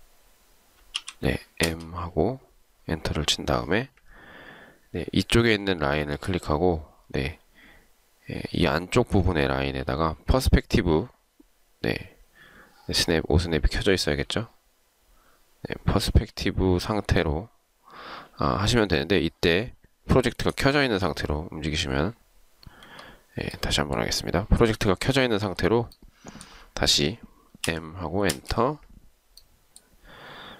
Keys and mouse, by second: 1.1 m, 1.7 space, 22.8 Escape, 27.8 m.